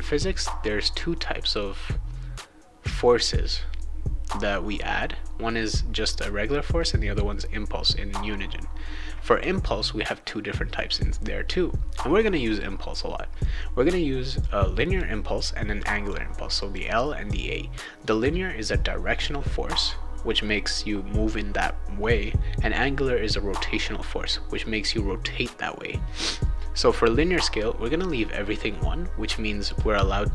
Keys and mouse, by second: 14.4 click, 15.8 click, 16.6 click, 17.2 click, 18.1 click.